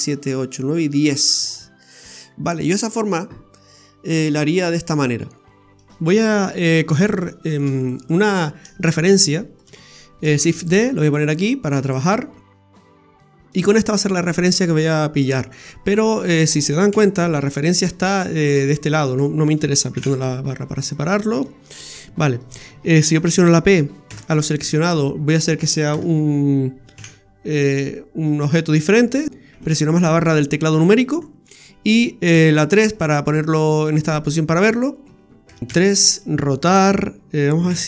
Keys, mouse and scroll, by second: 3.5-4.9 scroll down 7, 29.5 KP_Divide, 31.5-31.9 scroll down 2, 32.3 KP_3, 33.7-34.1 scroll down 1, 34.1 middle click, 35.5 Tab, 35.6 scroll down 2, 35.6 a, 35.6 KP_3, 36.7 r.